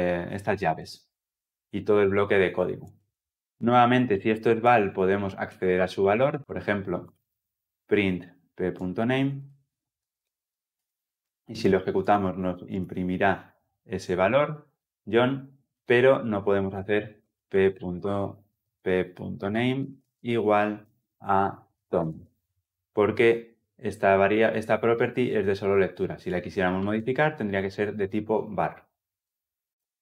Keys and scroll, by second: 6.4 Return, 10.6 Return, 19.7 Return, 29.5 ctrl+z.